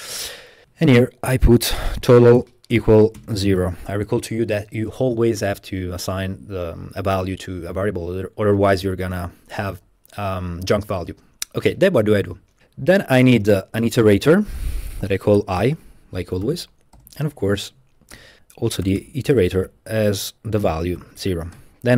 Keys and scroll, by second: 0.1 Escape, 0.2 typing, 1.5-4.1 typing, 12.9 Up, 13.3 Up, 14.3-19.6 typing, 17.0 Escape, 20.7 0, 21.0 ', 21.6 Return.